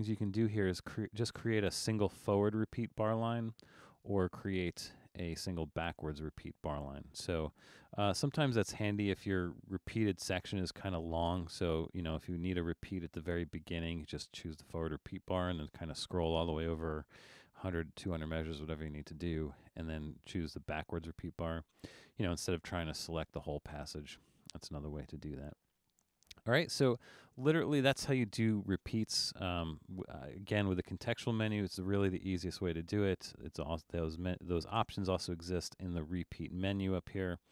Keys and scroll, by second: 8.3 super+z, 8.7 super+z, 24.4 super+z, 24.8 super+z.